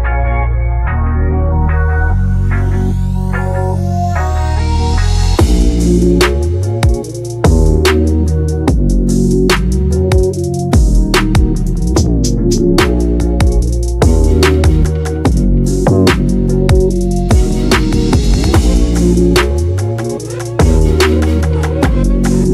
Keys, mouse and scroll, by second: 5.6-6.3 scroll up 1, 6.3-7.9 shift+middle drag, 7.9-9.9 drag, 11.2-13.2 drag, 14.0-16.8 middle drag, 16.8-18.8 drag, 18.8-20.6 right drag, 20.6-22.5 drag.